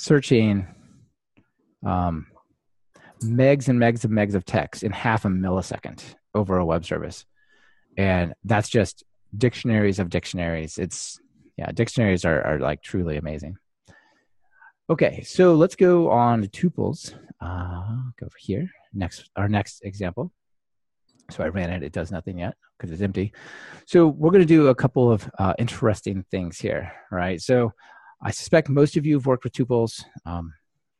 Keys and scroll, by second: 18.7 ctrl+shift+r.